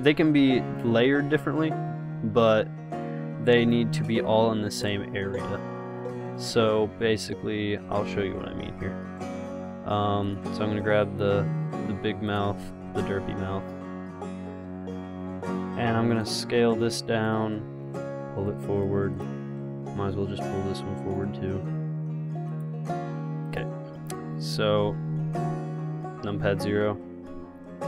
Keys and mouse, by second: 1.3 g, 2.4 s, 8.4 KP_0, 10.7 g, 12.8 g, 16.8 s, 18.7 click, 21.4-22.4 drag, 22.8-24.8 drag, 25.5 KP_0, 27.1 KP_0.